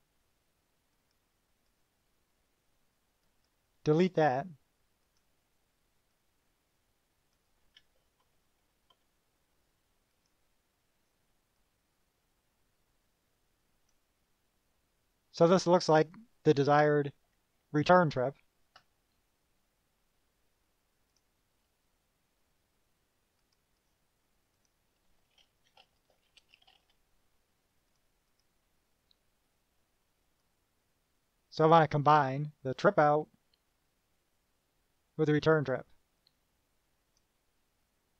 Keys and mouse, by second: 1.1 click, 1.8 right click, 3.6 click, 5.2 click, 6.3-7.7 drag, 10.3 click, 11.2 click, 11.7-14.2 drag, 14.4-16.1 drag, 16.7 KP_Subtract, 18.2 KP_Subtract, 21.3 click, 23.6 click, 24.0 right click, 24.7 click, 25.6-27.5 typing, 28.1 click, 28.4 click, 30.6-32.0 drag, 36.5-37.5 drag.